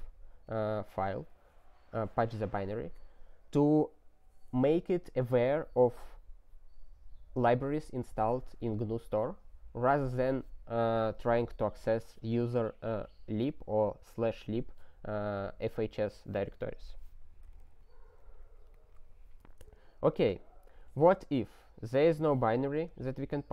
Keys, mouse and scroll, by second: 18.0 ctrl+n, 18.2 ctrl+n.